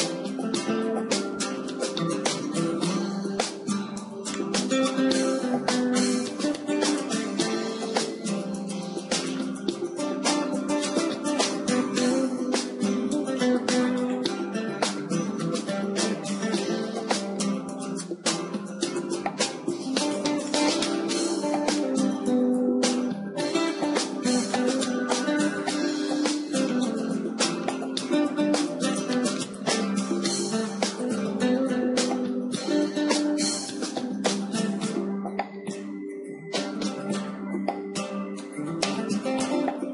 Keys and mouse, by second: 2.7 g, 4.8-6.7 drag, 5.4 Tab, 6.7-8.2 middle drag, 10.1 KP_0, 11.3 middle click, 14.2-16.1 drag, 16.8 middle click, 17.7 shift+a, 22.3 click, 23.0-24.4 middle drag, 24.2 s, 24.4 s, 24.5 middle click, 25.1-28.8 drag, 27.8 g, 29.6 click, 30.2 KP_1, 30.9-32.9 drag, 32.9 d, 32.9 s, 35.3-36.3 drag, 35.3 g, 38.2-39.9 drag, 39.6 Tab.